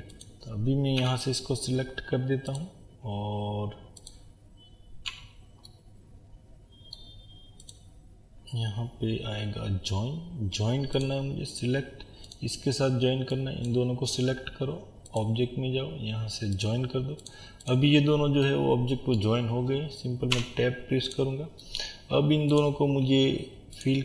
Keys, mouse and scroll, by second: 1.0 a, 4.1 click, 5.1 Tab, 5.7-12.3 middle drag, 12.3 click, 16.6-18.5 drag, 18.5-21.1 middle drag, 20.3 Tab, 21.1 click, 21.6 middle click, 22.5 click.